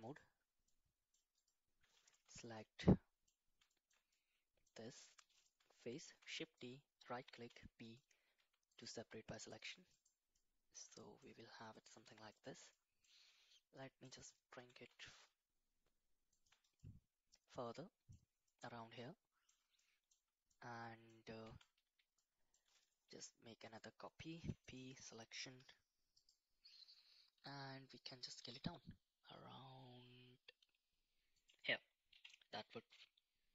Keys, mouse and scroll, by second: 0.6 middle click, 1.3 click, 2.2 3, 2.4 click, 2.8 middle click, 3.6 shift+middle click, 4.1 middle click, 6.1 shift+d, 7.4 p, 8.3 Tab, 8.7 click, 9.3-9.6 middle drag, 9.9 click, 10.3-10.7 middle drag, 10.9 shift+middle click, 11.7 shift+middle drag, 12.0 middle drag, 12.7 middle click, 13.8 middle click, 14.5 g, 16.8-18.1 middle drag, 18.5-19.5 middle drag, 19.8 middle click, 20.5-21.1 middle drag, 21.4 Tab, 21.8 a, 22.1 middle click, 23.1 shift+d, 24.3 p, 25.5 Tab, 28.3 s, 32.1 KP_1.